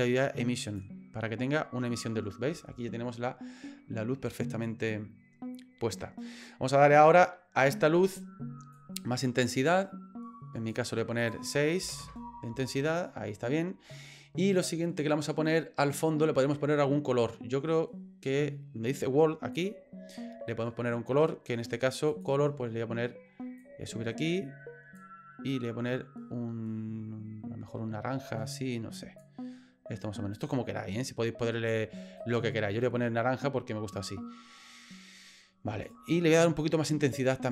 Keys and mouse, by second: 8.7-10.7 drag, 11.2-12.4 drag, 12.9 right click, 19.5 click, 32.2 right click, 35.8 right click, 36.3 right click.